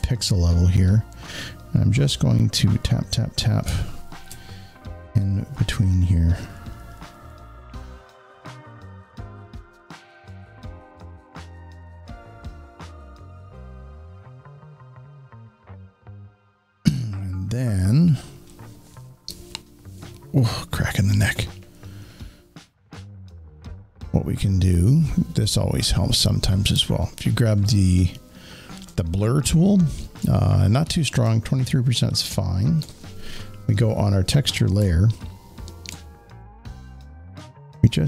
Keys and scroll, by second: 3.6 alt+space, 11.0-13.4 typing, 15.9 space.